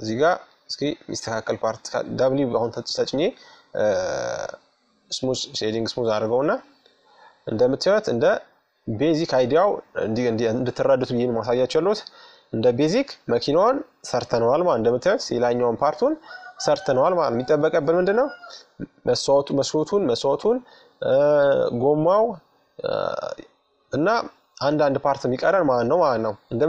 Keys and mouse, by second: 0.8 w, 4.5-7.1 middle drag, 7.1 click, 10.1-12.9 middle drag, 14.2-15.9 middle drag, 21.3-24.3 middle drag, 25.1-26.6 middle drag.